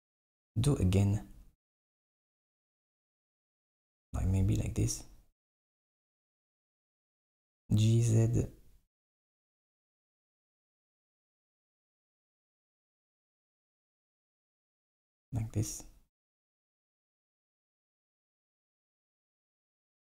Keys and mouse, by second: 0.3 alt+e, 4.2 KP_1, 6.8 g, 12.0 z, 13.1 alt+e.